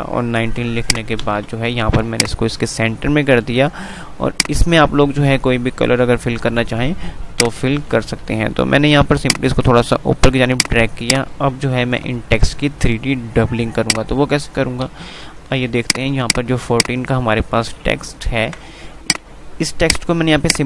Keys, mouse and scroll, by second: 0.6 click, 1.4 c, 1.8 click, 3.1 typing, 6.5 F3, 7.1-10.5 drag, 10.8 F2, 11.0 click, 11.3 F2, 12.6 F3, 13.1 F2, 15.8 click, 16.4 F2, 18.8 ctrl+z, 19.3-20.6 drag.